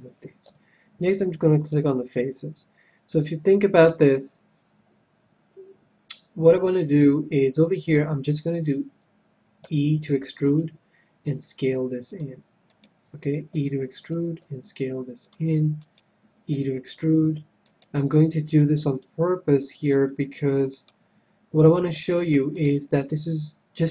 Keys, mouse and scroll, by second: 0.4 a, 1.6-3.3 drag, 3.4 click, 3.8-5.6 right drag, 9.5 e, 10.5-12.1 right drag, 11.2 s, 12.1-14.0 drag, 12.9-17.6 right drag, 13.5 e, 14.5 s, 15.2-17.1 drag, 16.5 e, 16.8 middle click, 17.8-19.5 right drag, 18.0 s, 19.0-20.9 drag, 19.0 middle click, 20.7 middle click, 21.0-23.9 right drag, 21.9 e, 22.9 s.